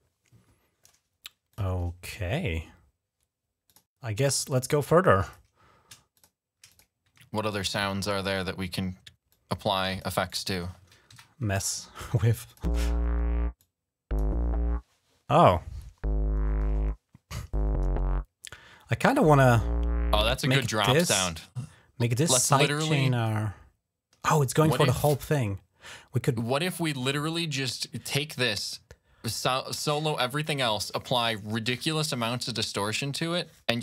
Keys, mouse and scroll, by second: 1.3 click, 3.5 click, 4.2 click, 5.0 click, 6.0 shift+click, 6.5 click, 7.2 alt+click, 7.9 click, 9.1 click, 10.1 click, 10.9 ctrl+Up, 12.3 click, 12.4 space, 13.4 click, 20.5 space, 22.9 ctrl+scroll down 3, 25.0-25.5 scroll down 2, 25.7-26.0 scroll up 2, 27.1 scroll up 1, 28.4 click, 29.5 ctrl+scroll up 1.